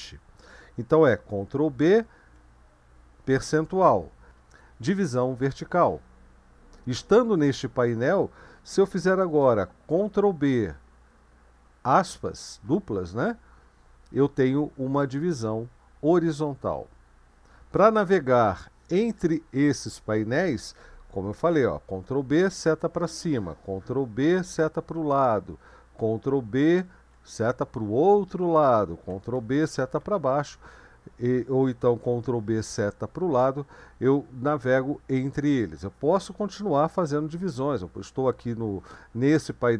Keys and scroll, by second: 1.9 ctrl+b, 3.5 shift+5, 9.9 ctrl+b, 11.9 ", 22.0 ctrl+b, 22.6 Up, 24.2 ctrl+b, 24.8 Left, 26.8 ctrl+b, 27.4 Right, 29.3 ctrl+b, 29.9 Down, 32.0 ctrl+b, 32.6 Left.